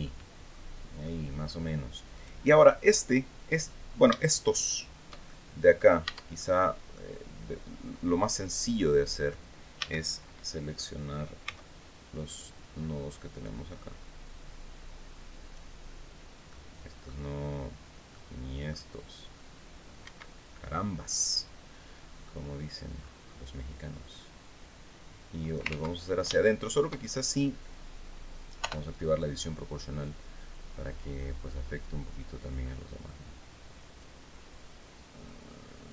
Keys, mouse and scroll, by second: 0.5 click, 1.6 right click, 4.7 shift+click, 5.5 Tab, 5.8 click, 7.7-8.9 drag, 9.3 a, 10.9 c, 11.7 scroll up 1, 12.9-15.2 drag, 16.0 click, 17.6 click, 19.5 Escape, 20.1 click, 20.1 scroll up 2, 22.0-22.3 scroll down 2, 22.5-23.0 scroll up 2, 23.9-25.2 drag, 25.2 ctrl+z, 25.7 ctrl+shift+z, 25.8 shift+right click, 26.4 shift+scroll down 2, 28.1 o, 30.0 click, 30.7-31.4 scroll down 4, 32.5-32.9 scroll down 2, 33.4 scroll down 2, 33.6-34.0 scroll up 2, 34.4-34.7 scroll up 1.